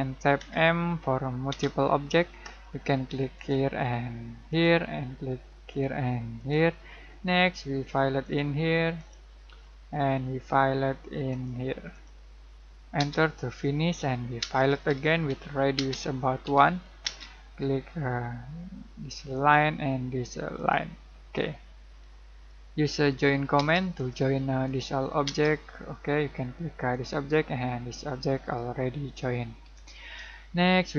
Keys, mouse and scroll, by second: 0.3 m, 1.5 space, 2.6-3.3 scroll up 1, 3.3 click, 6.8 middle click, 8.2 click, 9.2-9.6 scroll down 1, 9.6 middle click, 10.1-10.7 scroll up 1, 11.2 middle click, 12.9 space, 13.4 middle click, 14.4-17.0 typing, 17.5-19.3 scroll up 1, 19.3 click, 21.1 scroll down 1, 21.9 middle click, 22.9 j, 23.5 space, 23.9 click, 25.2 space, 26.9 click, 29.6 Escape.